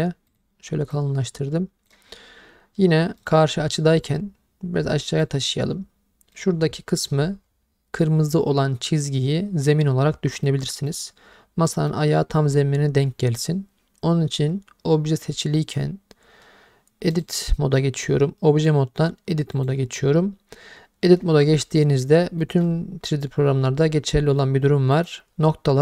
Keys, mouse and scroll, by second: 0.3-1.0 drag, 3.2 click, 5.2-7.3 drag, 10.5-10.9 middle drag, 11.7 middle click, 17.1-19.7 drag, 21.6 middle click, 22.4 middle click, 25.0 click.